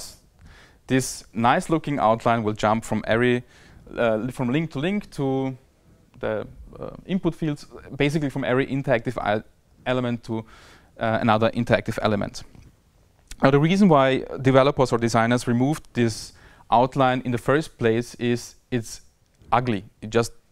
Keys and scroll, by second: 0.3 Tab, 3.3 Tab, 4.1 Tab, 4.7 Tab, 5.5 Tab, 5.9 Tab, 6.4 Tab, 6.9 Tab, 7.4 Tab, 8.3 Tab, 11.3 Tab, 12.1 Tab, 12.6 Tab, 13.5 Tab, 14.3 Tab, 14.8 Tab, 15.4 Tab, 16.2 Tab, 19.2 Tab, 20.0 Tab.